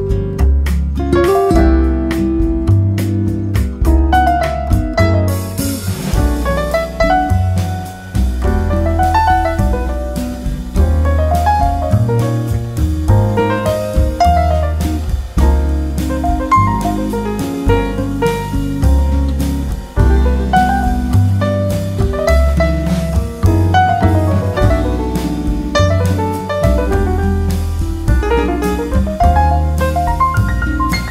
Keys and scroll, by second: 16.7 Right, 19.5 Right, 26.3 Left, 29.3 Right.